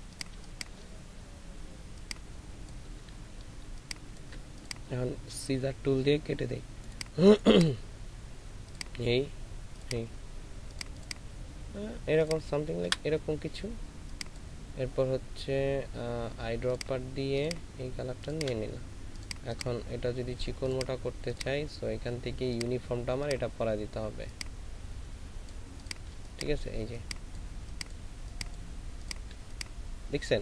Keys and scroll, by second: 13.0 Delete, 26.3 space, 29.5 ctrl+alt+space.